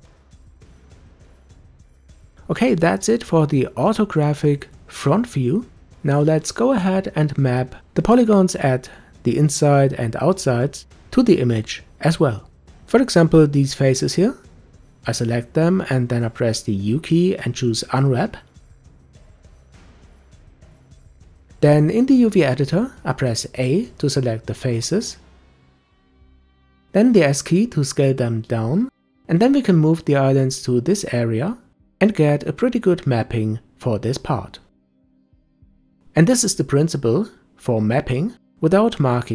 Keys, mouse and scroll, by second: 0.2 g, 5.4 Tab, 5.9-6.4 scroll down 2, 6.4-9.4 middle drag, 10.6-12.0 scroll up 3, 12.0 click, 12.6 Tab, 13.2 click, 13.6 Tab, 14.4 click, 15.4 shift+click, 19.0 u, 21.7 scroll down 1, 23.7 a, 25.0 s, 28.9 g, 32.2 scroll up 1, 33.1 s, 36.2 g, 36.8 s.